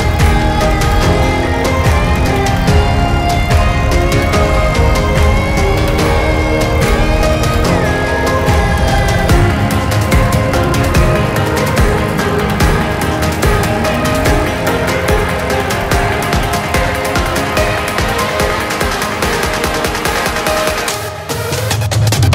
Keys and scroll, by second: 0.4 Delete, 19.1 ctrl+z, 19.6 ctrl+z.